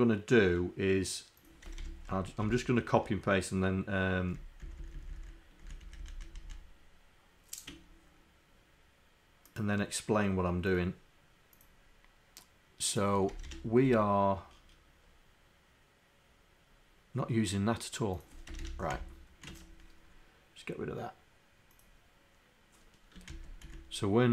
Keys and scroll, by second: 2.5 shift+Down, 4.7 shift+Down, 5.9 shift+Up.